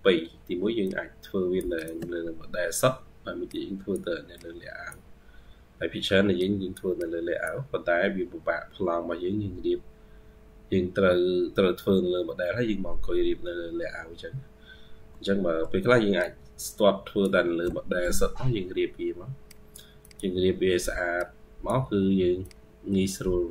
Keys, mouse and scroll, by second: 0.2-1.4 ctrl+q, 1.6 ctrl+click, 2.8-15.8 ctrl+q, 16.0 ctrl+click, 16.3-17.4 ctrl+q, 18.4 ctrl+q, 19.9 double click, 20.9 ctrl+q.